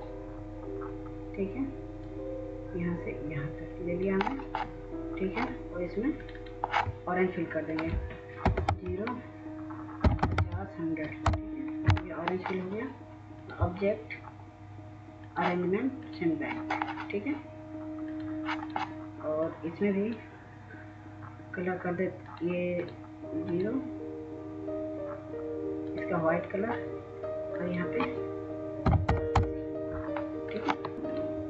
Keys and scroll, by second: 8.3 typing, 9.7-10.4 typing, 11.2 Return, 28.8 typing, 29.4 Return, 30.7-31.4 typing.